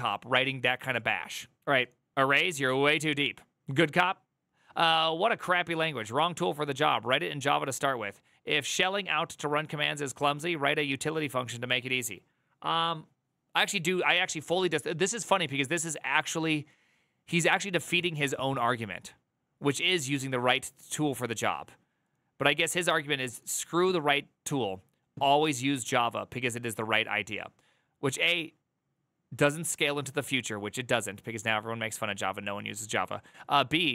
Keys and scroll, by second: 1.6 alt++.